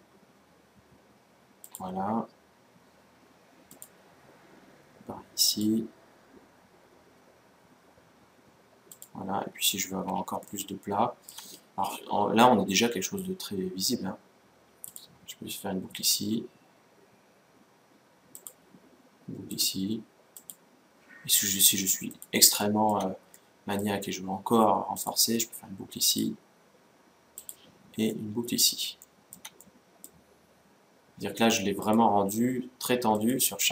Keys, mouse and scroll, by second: 3.5-5.2 drag, 9.4-11.9 middle drag, 9.4-9.8 scroll up 1, 14.6-16.4 drag, 19.2-21.0 drag, 22.4-24.7 middle drag, 24.7-26.6 drag, 27.9-31.2 middle drag, 31.6-33.4 drag.